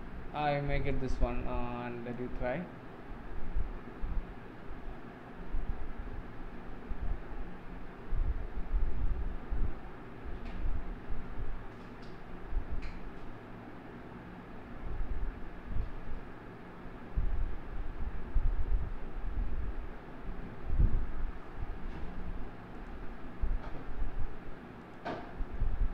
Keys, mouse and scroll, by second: 22.7 click, 24.8 click.